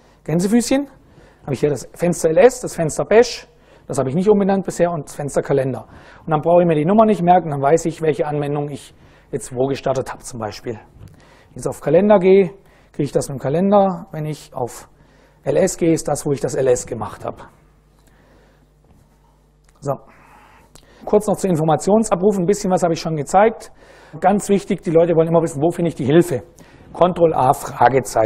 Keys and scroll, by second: 0.9 Up, 2.2 Down, 2.9 Down, 3.4 Up, 4.4 Down, 12.2 Return, 13.4 ctrl+a, 14.2 shift+', 14.7 shift+Up, 15.5 Return, 28.1 super+Right.